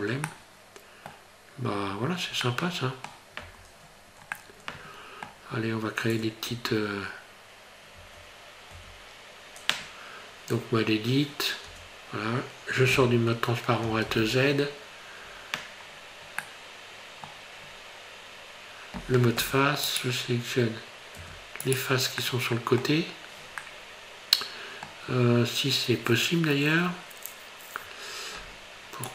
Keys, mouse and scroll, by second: 0.2 middle click, 1.9 scroll up 1, 2.4 middle click, 3.5 Tab, 3.9 scroll up 2, 4.4 middle click, 5.6 scroll up 2, 6.6 Tab, 8.1 Tab, 8.8 Tab, 11.7 Tab, 14.1 alt+z, 15.8 scroll down 3, 16.4 middle click, 17.7 scroll up 2, 19.3 3, 19.9 right click, 21.2 3, 21.7 right click, 22.2 middle click, 23.6 middle click, 26.8 scroll up 2.